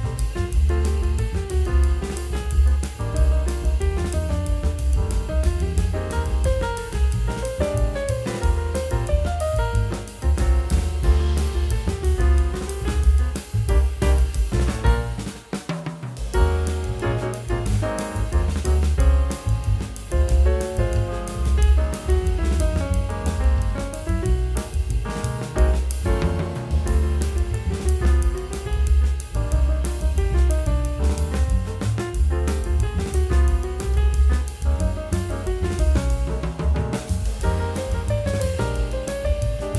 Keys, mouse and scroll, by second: 25.5 F11, 29.0 double click, 30.9 double click.